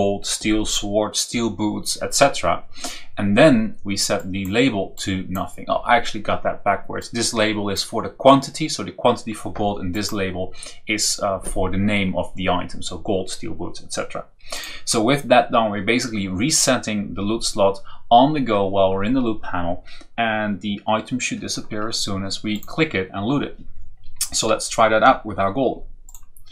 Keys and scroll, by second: 24.9 Down.